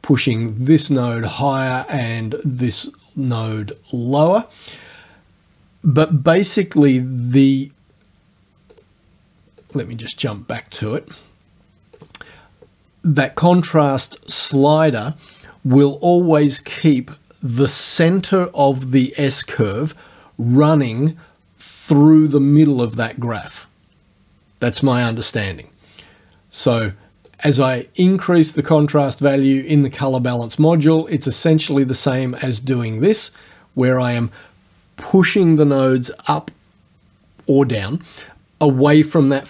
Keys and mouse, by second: 1.9-4.7 drag, 8.8 click, 9.6 click, 10.8 click, 12.0 click, 20.9 click, 22.0 click, 27.3-28.8 drag, 29.7-34.2 drag.